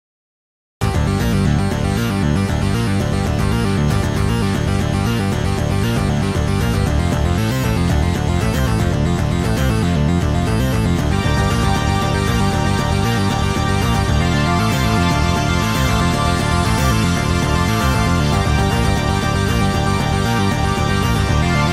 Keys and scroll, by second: 2.2 space, 4.3 Escape, 5.4 Escape, 16.3 Return, 18.4 Escape, 18.6 Escape.